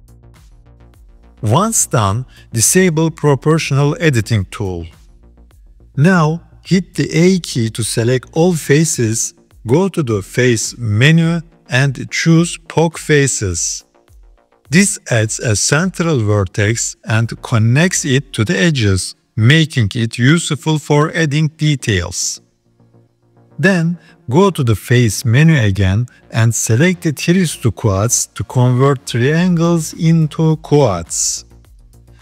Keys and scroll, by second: 0.5 s, 6.3 a.